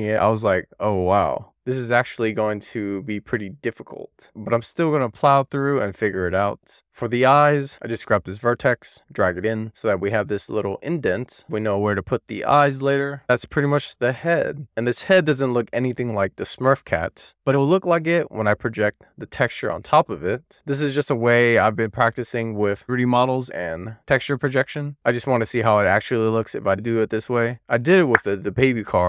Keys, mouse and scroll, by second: 0.1 super+z, 0.3 middle click, 0.9 click, 1.4 shift+click, 1.7 middle click, 2.5 middle click, 2.7 click, 3.1 g, 4.9 middle click, 5.5 click, 5.7 middle click, 6.3 scroll down 2, 6.4 middle click, 8.0 click, 8.7-11.6 middle drag, 11.6 scroll down 1, 11.8-12.5 scroll up 2, 13.0 middle click, 13.1 alt+z, 13.4 alt+z, 14.7 alt+z, 15.8-16.7 middle drag, 16.9-17.4 scroll down 3, 17.4-17.9 shift+middle drag, 17.9 scroll down 1, 18.0-18.7 scroll up 3, 18.7-21.5 middle drag, 21.6 scroll down 1, 21.8-22.7 scroll up 1, 22.7 scroll down 1, 22.8-23.9 scroll up 1, 25.4 alt+middle click, 26.0 alt+middle click, 26.6 alt+z, 27.0-27.8 scroll up 1, 27.8 scroll up 1, 28.5 alt+z.